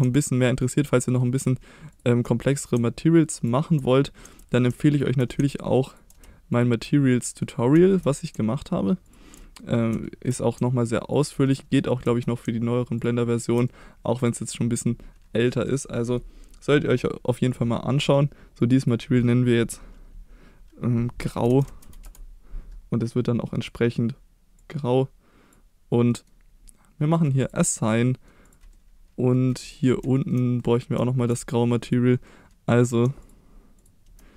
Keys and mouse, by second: 0.6 ctrl+click, 1.1 middle click, 1.9 shift+click, 2.3 middle click, 4.9 shift+click, 5.9 ctrl+click, 6.5 shift+click, 7.3 middle click, 7.8 shift+middle click, 9.0 ctrl+click, 9.4 middle click, 10.0 shift+middle click, 11.1 ctrl+click, 11.5 middle click, 13.0 ctrl+click, 13.7 middle click, 14.9 middle click, 15.9 middle click, 17.5 click, 18.6 click, 18.8-22.5 drag, 26.1 middle click, 27.4 click, 28.1 middle click, 28.5 click, 28.7 middle click, 29.6 middle drag, 30.2 shift+middle click, 30.6 middle click, 32.3 middle click, 33.2 shift+click, 33.8 shift+click.